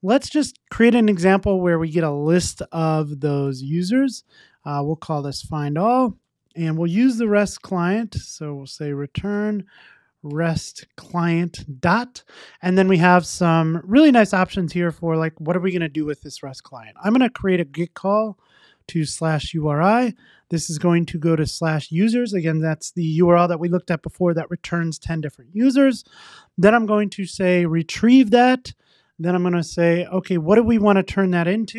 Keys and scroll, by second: 11.1 Return, 16.8 Return, 20.1 Tab, 27.8 Return.